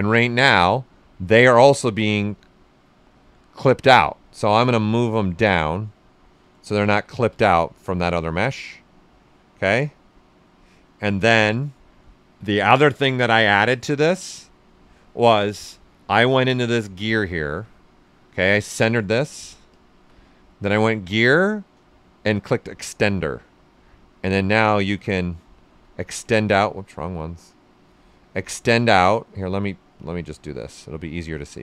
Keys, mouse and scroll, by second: 4.3-5.7 drag, 5.7 right click, 6.8 shift+f, 7.3 ctrl+right click, 7.9 typing, 7.9-11.1 right drag, 11.1 w, 17.2 click, 20.4 click, 24.9 click, 25.8 ctrl+z, 26.7-28.7 right drag, 28.7 right click, 29.9 click, 30.5 right click.